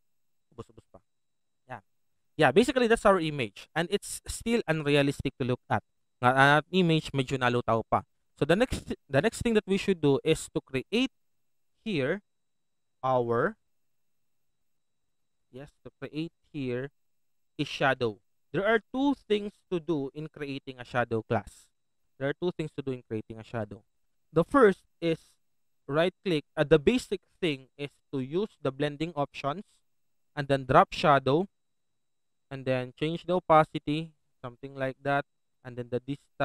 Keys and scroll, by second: 0.5 typing.